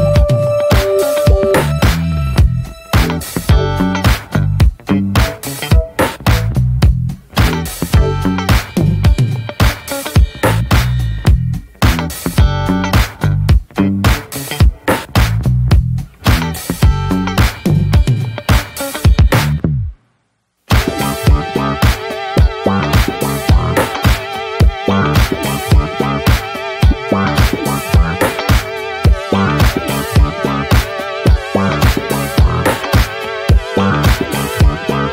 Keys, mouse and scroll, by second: 0.5-1.4 scroll up 8, 1.4-10.0 drag, 10.0 scroll down 5, 10.1 middle drag, 10.3-10.7 drag, 10.7 shift+d, 11.6 scroll down 3, 11.7 middle click, 12.0 ctrl+shift+click, 12.2 middle click, 12.4-12.9 scroll up 2, 12.9-15.5 drag, 18.6 click, 25.5 middle click, 26.2 ctrl+shift+right click, 26.7-27.1 middle drag, 27.1 ctrl+shift+click, 27.3 scroll down 2, 27.4 middle click, 27.6-28.7 drag, 28.7-29.4 scroll up 5, 28.8 middle click, 29.4-30.3 drag, 30.6-31.0 scroll up 1, 31.0-34.1 drag, 34.1 scroll up 1, 34.5-35.1 drag.